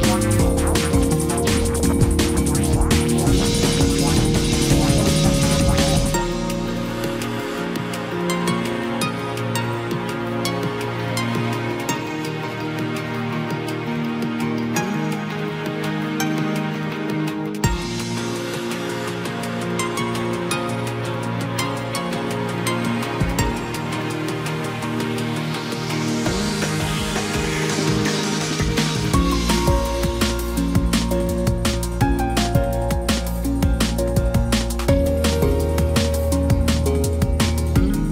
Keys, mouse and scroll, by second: 12.7 Left.